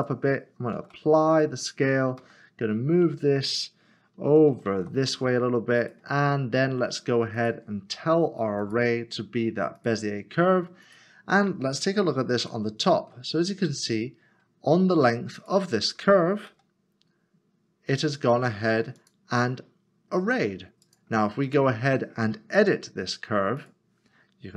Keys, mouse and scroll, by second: 0.7 ctrl+a, 2.2 g, 4.7 z, 7.3 click, 12.4 KP_7, 13.3 scroll down 1, 14.3 7, 15.3 click, 16.5 g, 19.0 g, 22.6 Tab, 23.6 click.